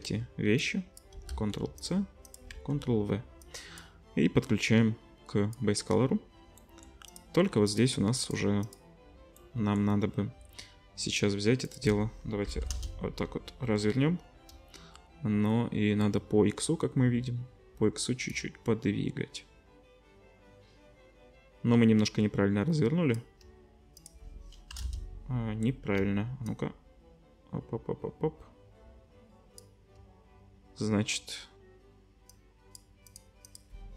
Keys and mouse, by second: 1.3 ctrl+c, 1.8-2.3 drag, 2.5 ctrl+v, 7.9 middle click, 8.3 middle click, 8.8-11.6 middle drag, 14.5-23.4 shift+drag, 26.0-33.2 shift+drag, 33.2 middle click, 33.4-33.9 drag.